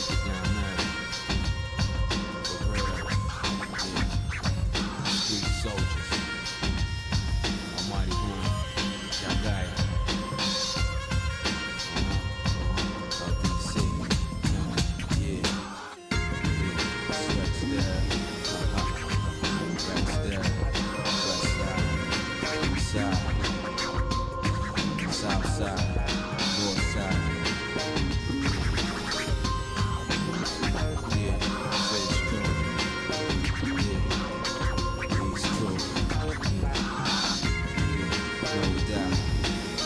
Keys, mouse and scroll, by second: 1.5 x, 2.6 middle click, 3.4 shift+middle click, 4.3-4.9 scroll up 3, 5.7 ctrl+z, 6.4 middle click, 7.0-7.3 scroll down 2, 8.4 x, 12.9 click, 13.5 middle click, 14.1 scroll up 1, 14.4-14.7 scroll down 1, 15.1 shift+click, 16.7 x, 18.6 ctrl+Tab, 19.8 click, 20.7 middle click, 21.9 shift+click, 22.9 KP_Divide, 25.0 shift+click, 27.4 shift+click, 28.3 x, 30.3-31.6 shift+middle drag, 31.9 middle click, 33.0 shift+middle click, 33.8 ctrl+Tab, 35.4 alt+shift+click, 36.4 shift+middle click, 37.7 f, 38.1 middle click, 39.0 click, 39.0 f, 39.5 alt+shift+click.